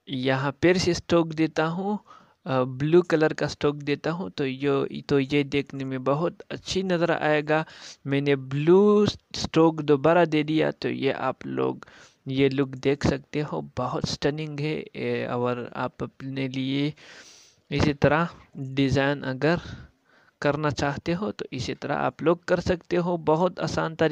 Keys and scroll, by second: 7.0 ctrl+space, 12.8 ctrl+space.